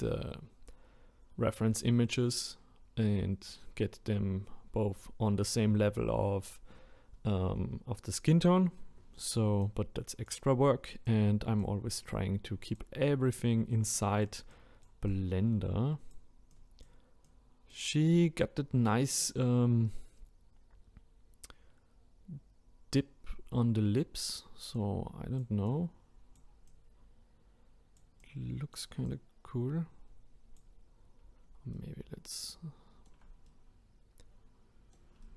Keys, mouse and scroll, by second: 18.4-20.3 drag.